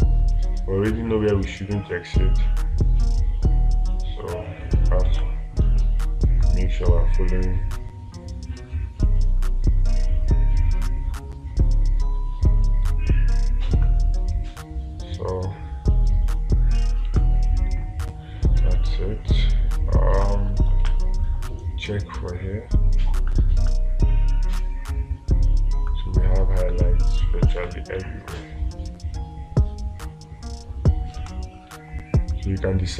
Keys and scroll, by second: 5.6 space, 17.6 space, 20.7 space, 31.6 space.